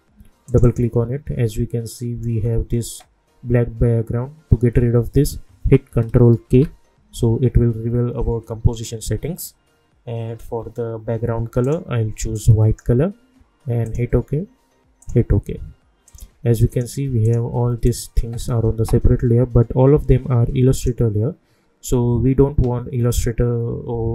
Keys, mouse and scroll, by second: 6.5 ctrl+k, 11.6-13.8 drag, 20.7 click.